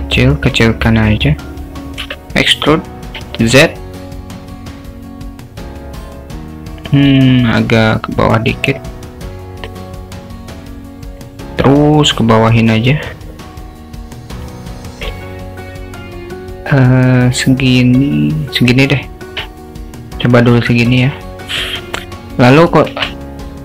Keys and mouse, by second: 2.1 e, 11.4-15.1 drag, 17.3-18.8 drag, 19.3 Tab, 22.8 shift+a.